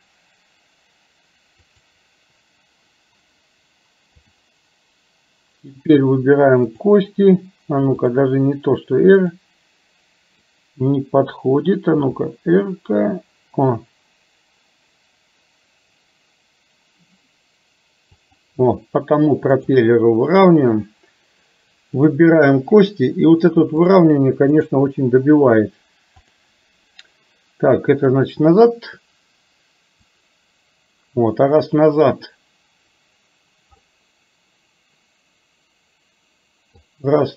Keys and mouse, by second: 4.4-5.5 drag, 12.1 r, 19.6-21.1 drag, 23.9 click, 28.2-30.2 drag, 33.9-37.0 middle drag.